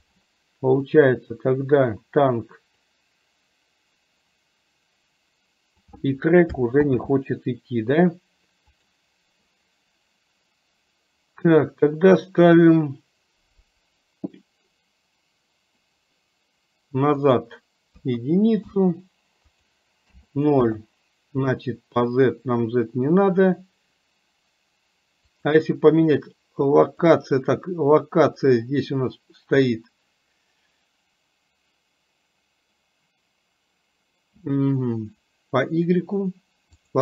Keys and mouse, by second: 0.9 click, 2.9-5.9 drag, 8.8 click, 17.3-18.7 drag, 19.6-20.7 drag, 25.4 click, 27.2 click, 36.8 click.